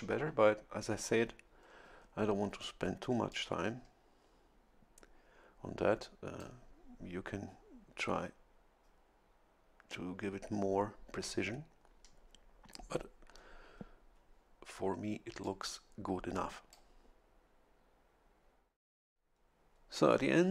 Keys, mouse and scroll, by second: 3.3-6.8 drag, 15.4-16.9 drag.